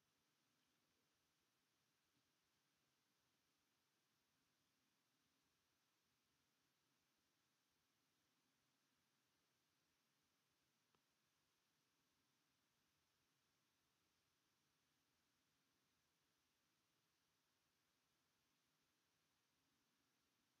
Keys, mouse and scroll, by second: 0.0 shift+middle click, 0.8 r, 1.2 s, 2.4-3.8 shift+middle drag, 3.8 alt+click, 4.3 s, 6.4 alt+click, 6.9 s, 9.6 alt+click, 10.1 s, 12.0 r, 12.5 s, 14.9 click, 15.9 s, 17.4 click, 18.2 alt+click, 18.6 s, 20.1-20.6 scroll down 8.